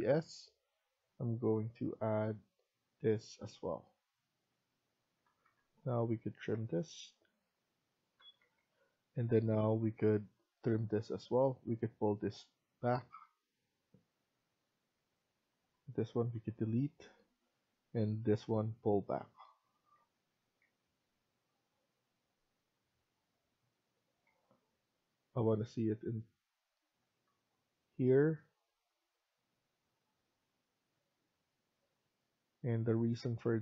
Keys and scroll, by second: 1.5 typing, 4.9 Escape, 5.2 Escape, 6.5 Escape, 6.5-7.1 typing, 8.1 Escape, 8.3 Escape, 16.2 Delete, 19.9 Escape, 20.5 Escape, 23.9 Escape, 24.2 Escape.